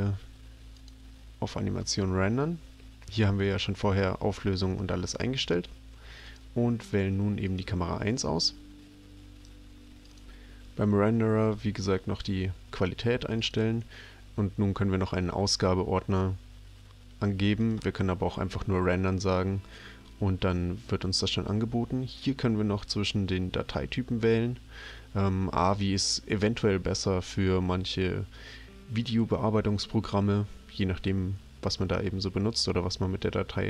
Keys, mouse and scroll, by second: 0.7 click, 6.3 click, 7.5 click, 10.0 click, 13.4 click, 17.6 click, 22.1 click.